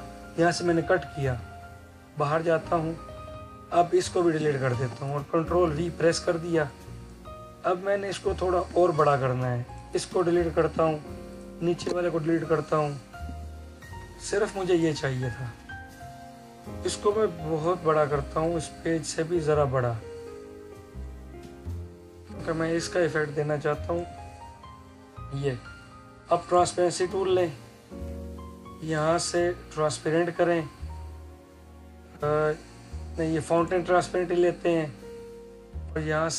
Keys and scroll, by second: 5.5 ctrl+v.